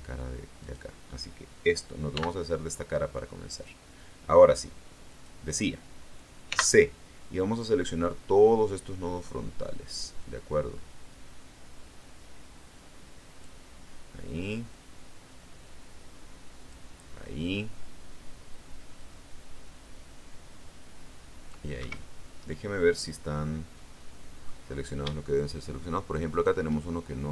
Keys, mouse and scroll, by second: 0.5 right click, 2.0 x, 3.5 click, 5.0 click, 6.4 c, 10.1-13.5 drag, 14.6-16.8 drag, 18.9-21.5 drag, 21.7 Escape, 22.1-24.5 middle drag, 24.6-25.0 scroll up 3, 26.2 shift+right click, 26.7-27.3 shift+middle drag.